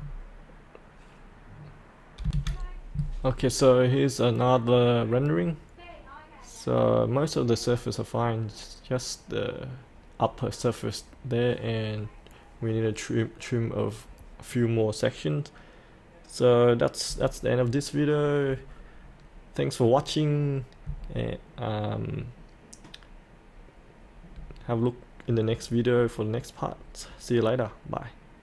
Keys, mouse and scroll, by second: 0.0-0.3 scroll down 1, 2.2 F8.